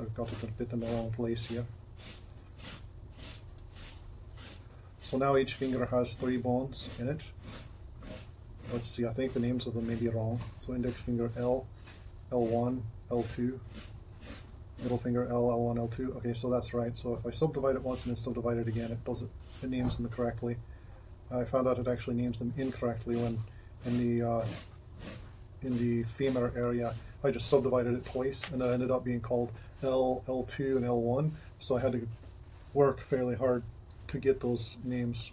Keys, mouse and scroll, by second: 3.6 g, 11.6 ], 12.7 ], 15.1 ], 15.5 ], 25.6 shift+], 30.0-31.9 typing.